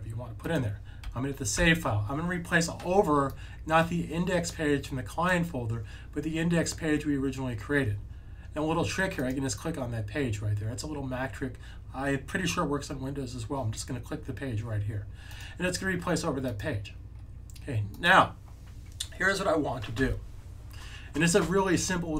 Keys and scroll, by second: 1.5 super+s.